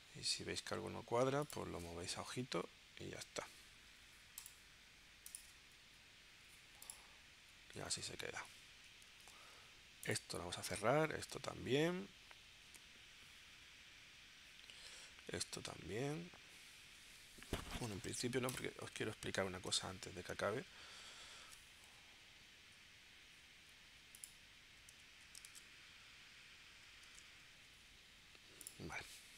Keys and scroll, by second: 2.4 Left, 3.2 Left, 5.8 Right, 7.9 super+Tab, 9.1 super+w, 10.9 super+q, 21.5 super+Tab, 25.5 super+Tab, 27.0 super+Tab.